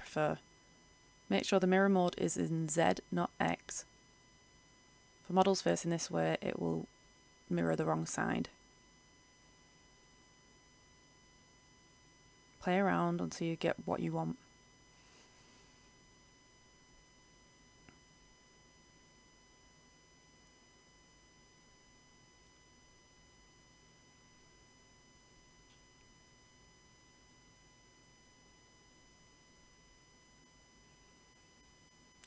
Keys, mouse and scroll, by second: 0.0-1.0 scroll up 1, 1.0-2.8 drag, 2.8 middle click, 3.5-3.9 scroll up 1, 4.2 click, 5.3-6.5 scroll down 1, 6.5-12.9 drag, 12.9 middle click, 14.4-17.2 drag, 17.5-19.2 middle drag, 19.4-21.2 drag, 21.3 middle click, 22.2-24.8 drag, 24.8-25.2 scroll up 1, 25.7-27.2 middle drag, 27.3 click, 28.5 middle click, 29.9-30.6 scroll down 1, 30.8 middle click, 31.9 click.